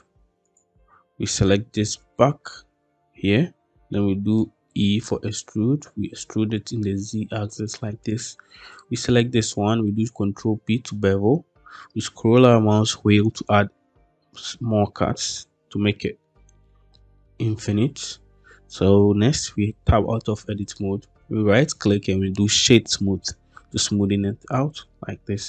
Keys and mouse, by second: 0.4 click, 1.4 shift+middle click, 2.0 middle click, 4.2 middle click, 4.7 e, 6.3 z, 7.5 click, 10.0 ctrl+b, 15.1 click, 15.9 middle click, 19.3 Tab, 20.6 click, 24.4-25.4 middle drag.